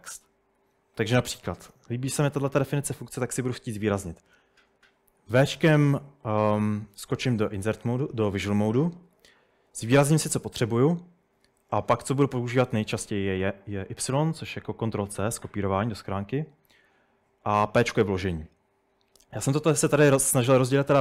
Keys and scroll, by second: 0.0-1.7 typing, 6.1-6.8 typing, 8.7-10.4 typing.